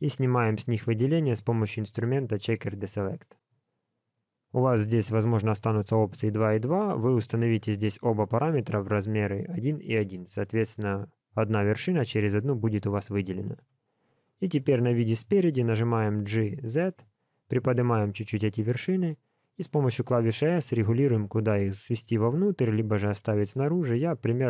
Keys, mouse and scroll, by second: 0.5 click, 4.3 click, 4.7 click, 7.3 click, 13.5 KP_1, 16.0 g.